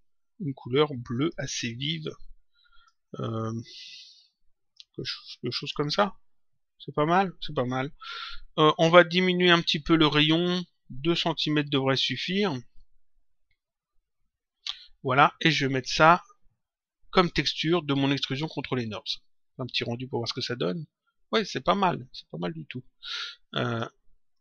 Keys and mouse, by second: 0.9 click, 3.6 click, 5.5 click, 10.0 click, 12.1 click, 15.4 click, 17.1 click, 20.1 click, 22.9 click, 24.3 click.